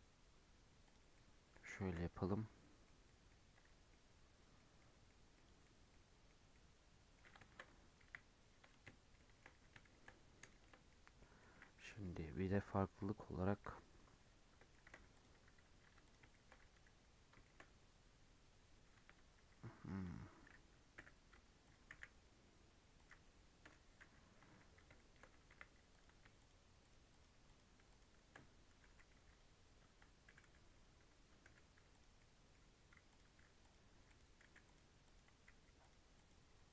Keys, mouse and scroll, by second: 1.1-2.1 middle drag, 2.1 Tab, 2.2-4.6 middle drag, 4.6 scroll down 3, 4.8-5.8 middle drag, 5.8 scroll down 1, 5.9-8.0 middle drag, 8.0 KP_1, 8.9 shift+scroll down 1, 9.1-9.4 shift+middle drag, 9.4-9.8 scroll up 3, 9.8-10.2 shift+middle drag, 10.2-10.5 scroll down 1, 10.5-11.2 shift+middle drag, 11.2 scroll up 1, 11.4-12.8 middle drag, 12.8 KP_3, 13.4 KP_1, 13.8-14.7 scroll up 4, 14.7 shift+middle click, 15.1 click, 15.3 Tab, 15.8 Tab, 16.0 click, 16.3 shift+middle click, 16.5-17.0 scroll up 3, 16.6 Tab, 17.4-18.9 shift+middle drag, 18.9 1, 24.7 scroll up 3, 24.9 shift+middle click, 25.5 1, 25.9 click, 26.3 shift+click, 26.8 shift+click, 27.1 shift+click, 27.4 shift+click, 27.9 shift+click, 28.7 g, 30.2 g, 31.4 g, 32.1 middle click, 33.1 click, 33.4 g, 34.0 click, 34.4 g, 35.0 click, 35.3 g, 36.1 click, 36.5 g.